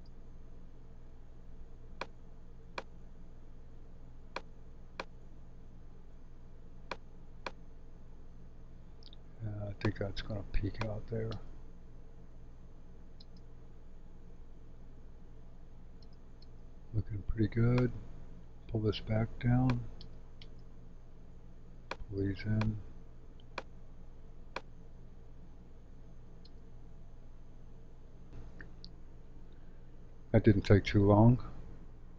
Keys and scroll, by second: 11.3 space, 13.2 space, 16.0 space, 20.0 space, 26.4 space, 28.3 space.